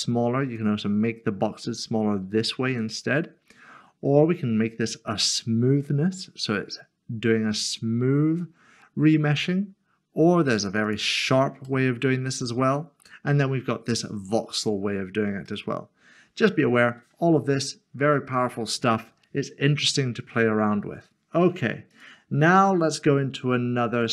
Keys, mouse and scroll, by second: 5.2 click, 6.1 click, 6.3 middle click, 15.4 click, 15.7 middle click, 21.9 click, 24.0 click.